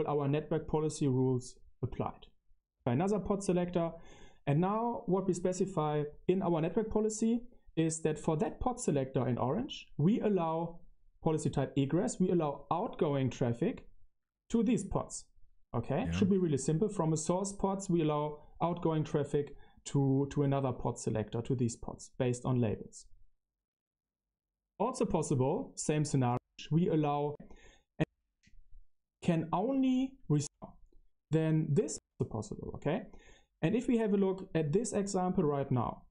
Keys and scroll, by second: 2.6 Right, 26.2 Tab, 27.2 Tab, 27.9 Tab, 28.2 Right, 30.3 Left, 31.9 Left, 32.3 BackSpace.